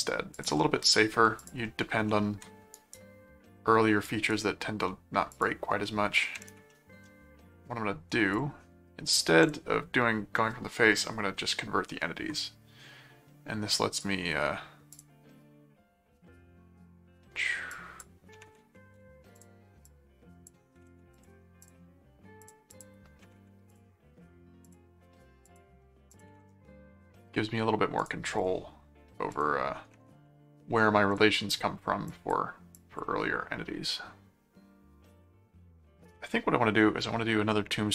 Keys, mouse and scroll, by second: 0.3 click, 1.4 ctrl+click, 1.9 ctrl+5, 2.7 right click, 4.0 right click, 5.3 click, 6.7 middle click, 8.3 click, 9.4 click, 11.4 ctrl+5, 13.9 click, 14.9 click, 17.7 click, 19.4 click, 21.1 click, 22.4 click, 23.7 click, 24.7 click, 25.5 click, 26.1 click, 28.0 click, 29.3 click, 31.1 click, 32.1 click, 32.7 click.